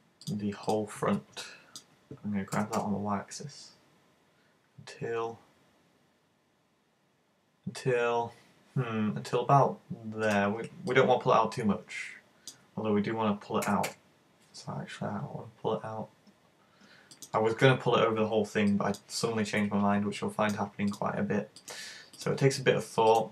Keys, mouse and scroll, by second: 0.3 shift+right click, 0.7 shift+right click, 1.5 middle click, 2.5 g, 10.3 click, 10.9 middle click, 13.7 g, 17.3 click, 18.7 middle click, 20.2 middle click, 20.9 right click, 21.5 shift+right click, 22.2 right click, 23.1 shift+right click.